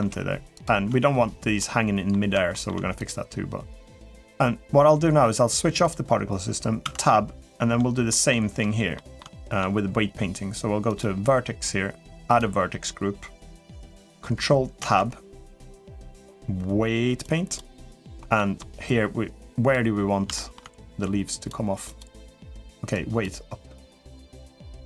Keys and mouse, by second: 0.2 g, 0.7 Tab, 1.4-1.9 middle drag, 2.3 shift+middle click, 2.7 click, 5.6 click, 6.8 Tab, 7.9 middle click, 8.7 middle click, 9.2 shift+middle click, 12.1 click, 14.6 ctrl+Tab, 18.2 middle click, 18.6 click, 20.1 shift+middle click, 20.6 click, 21.8-23.1 drag, 23.6 click, 24.1 middle click, 24.7 shift+middle click.